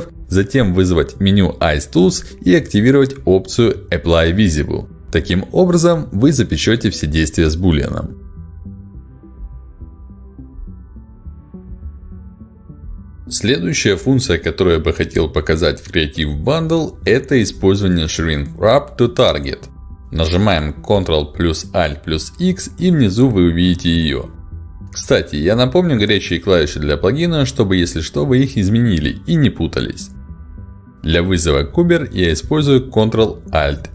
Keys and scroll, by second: 1.3 ctrl+shift+x, 5.4 ctrl+shift+x, 12.4 ctrl+z.